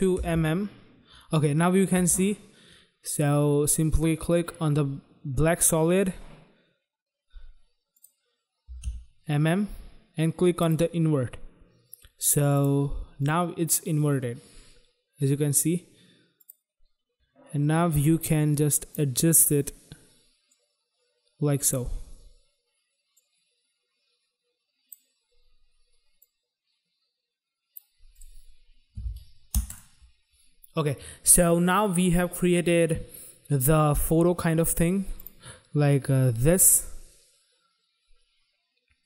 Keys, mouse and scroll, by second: 0.1 m, 0.2 m, 1.9 m, 7.9 click, 8.6 m, 8.7 m, 10.4 click, 12.5 click, 13.1 click, 16.2 click, 18.0 click, 20.5 click, 23.1 click, 26.2 click, 28.1 click, 28.2 click, 29.5 u, 29.6 click, 35.1 click.